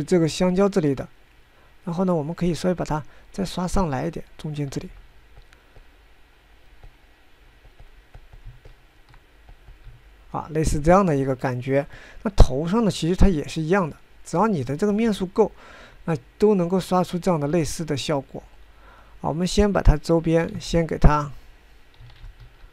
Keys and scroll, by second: 6.5 f, 19.1 f, 22.2 ctrl+z.